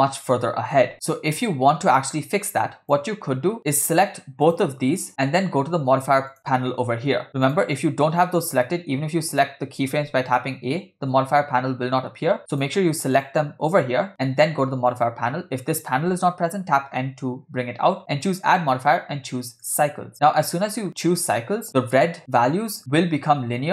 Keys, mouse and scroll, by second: 0.1-0.8 middle drag, 0.9-3.0 drag, 3.6 click, 4.5 shift+click, 6.3 click, 7.6 click, 8.6-9.4 drag, 10.3 s, 10.3 a, 12.5 click, 13.2 shift+click, 14.9 click, 16.8 n, 16.9 n, 18.2-19.8 drag, 20.7-21.3 scroll up 4, 22.2 click.